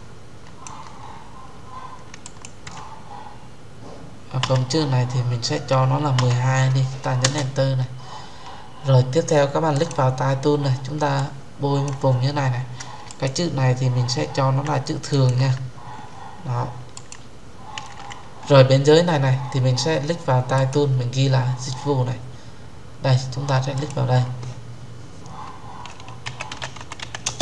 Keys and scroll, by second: 7.1 Return.